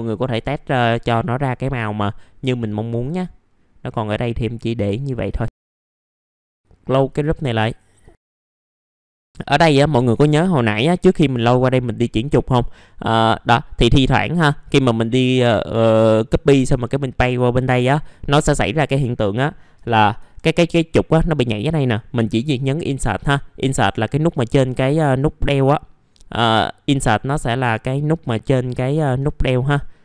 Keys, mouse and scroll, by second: 29.1 Insert.